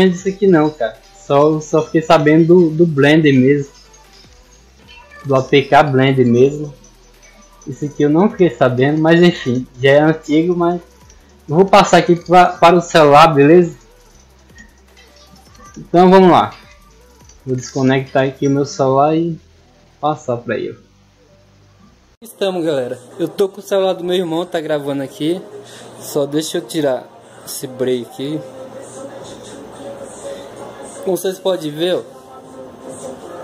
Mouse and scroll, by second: 0.0 right click, 0.4 right click, 0.6 right click, 1.1 right click, 1.6 click, 3.1 click, 4.0 click, 4.8 click, 5.5 click, 7.2 click, 7.6 click, 7.9 drag, 8.2 drag, 8.5 click, 8.8 click, 9.1 click, 9.3 click, 9.7 click, 10.0 click, 10.2 click, 10.6 drag, 10.9 click, 16.8 click, 22.0 click.